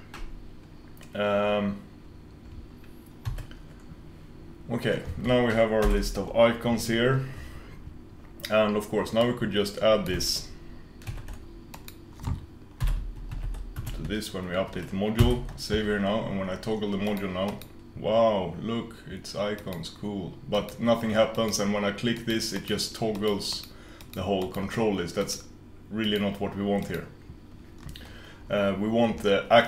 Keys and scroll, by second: 3.5 super+s.